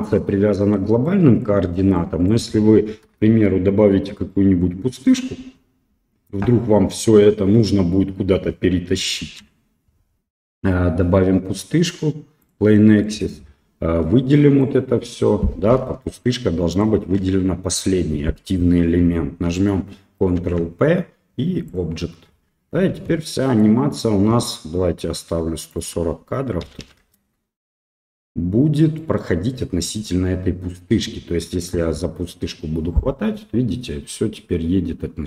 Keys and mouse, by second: 1.1-1.4 middle drag, 2.0 drag, 3.3 shift+a, 9.2 shift+a, 13.0-13.4 middle drag, 14.1-14.6 drag, 16.2 shift+click, 16.7-17.1 shift+drag, 20.2 ctrl+p, 22.9 space, 23.3 middle click, 25.7-28.1 drag, 29.0 middle click, 29.9 click, 32.0 g.